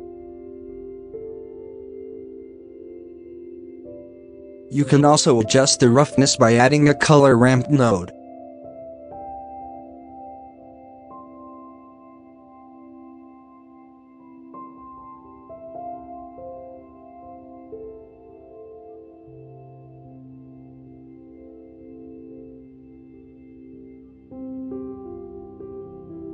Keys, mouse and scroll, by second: 2.9-3.3 shift+middle drag, 3.3 scroll up 8, 4.5 scroll up 7, 5.2 shift+a, 9.0 scroll up 5, 9.3 middle click, 10.3-16.5 drag, 16.5 alt+a, 17.8-20.6 drag, 20.6 scroll down 5, 26.2-26.3 scroll down 4.